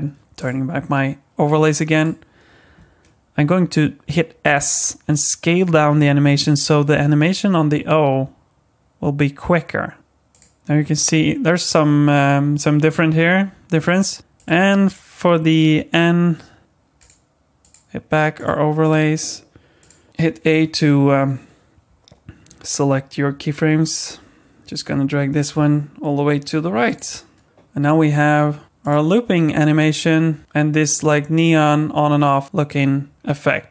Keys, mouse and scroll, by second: 0.2 click, 0.4 click, 1.9 click, 4.5 s, 10.0 space, 10.3 click, 10.9 click, 14.2 space, 14.3 click, 14.8 click, 15.9 click, 17.0 click, 18.4 click, 18.8 click, 19.8 click, 20.1 a, 23.3 g, 27.5 click, 28.3 space, 32.6 click.